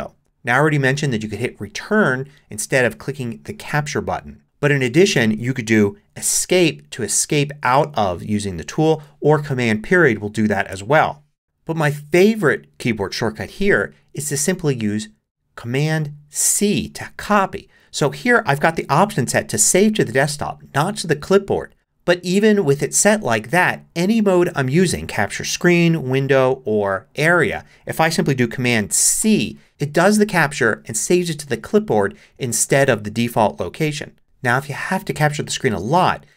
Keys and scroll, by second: 10.7 super+., 29.2 c.